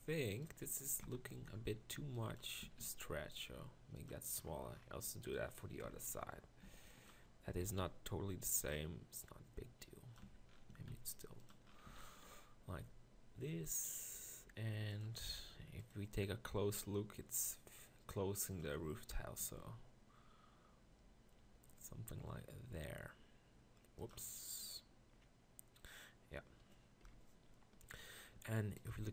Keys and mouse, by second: 1.0 ctrl+KP_Decimal, 1.4 z, 1.9 b, 2.7 s, 5.8 ctrl+KP_Decimal, 6.6 b, 7.6 s, 10.3 Tab, 10.7 s, 11.9 z, 12.8 g, 19.0 middle drag, 19.4 g, 24.7 middle drag, 24.8-26.0 middle drag, 27.2 KP_1.